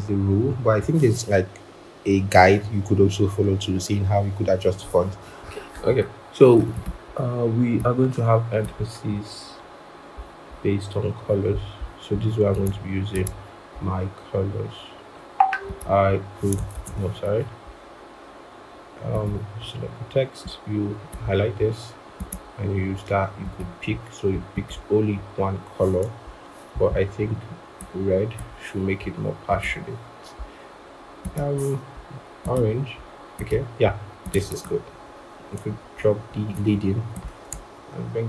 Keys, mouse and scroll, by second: 0.3 shift+Down, 6.7 double click, 11.5 scroll up 1, 16.6 ctrl+z, 26.8 double click, 34.8 alt+Up, 35.6 alt+Up, 36.1 alt+Down.